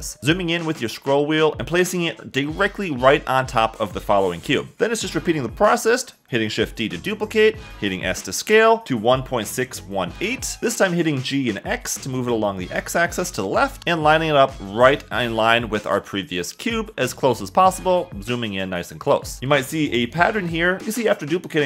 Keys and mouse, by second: 2.7 g, 3.5 y, 4.7 a, 7.1 shift+d, 8.2 Escape, 8.5-10.2 typing, 11.6 g, 12.0 x, 18.0 g, 18.2 x, 19.6-21.6 typing, 20.5 Escape.